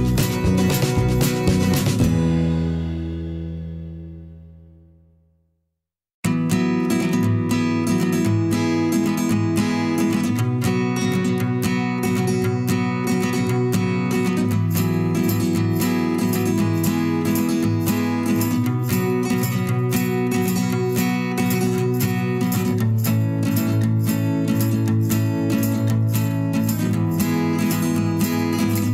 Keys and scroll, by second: 6.2 m, 10.2 v, 10.2 ctrl+a, 12.1 ctrl+shift+[, 21.5 Return, 24.6 v, 25.5 ctrl+shift+[, 25.7 ctrl+], 26.2 Up.